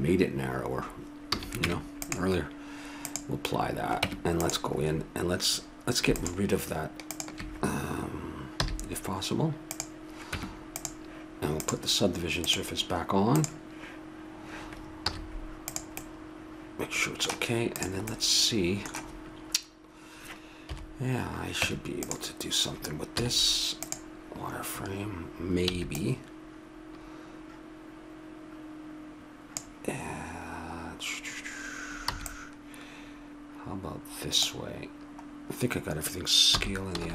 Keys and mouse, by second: 1.3 a, 1.6 Tab, 3.1-4.8 drag, 4.0 Tab, 8.6 x, 10.3 Tab, 11.6-13.3 drag, 13.3 click, 15.1 z, 16.0 middle click, 17.8-19.4 right drag, 19.4 click, 20.7 KP_7, 21.6 Tab, 23.3 z, 25.9 b, 32.1 b, 36.5 s.